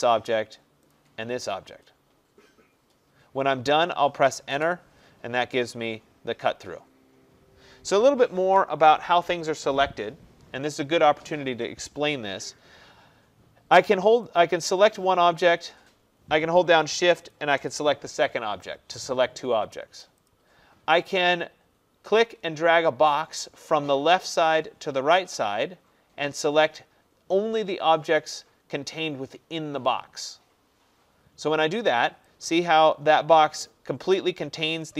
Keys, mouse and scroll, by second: 1.0 click, 4.5 Return, 8.5 ctrl+z, 9.4 click, 14.4 click, 17.4 shift+click, 20.3 click, 28.2 click, 31.9 click.